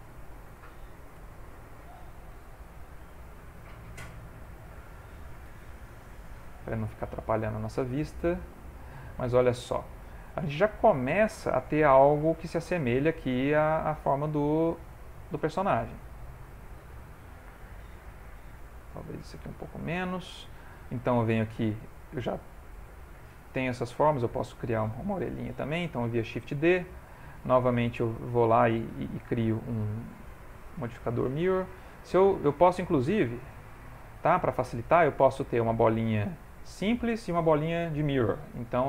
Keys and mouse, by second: 1.1 g, 4.0 middle click, 5.5 g, 6.5 middle click, 8.7 click, 9.3 ctrl+middle click, 11.3 ctrl+middle click, 12.2 shift+middle click, 12.5 shift+middle click, 13.7 shift+middle click, 15.6 click, 16.2 shift+middle click, 17.2 click, 18.2 s, 20.0 shift+middle click, 21.0 ctrl+middle click, 22.8 click, 23.8 click, 26.1 shift+d, 27.8 click, 31.5 click, 32.9 Escape, 33.5 x, 35.0 shift+middle click, 35.1 click, 35.6 g, 36.2 s.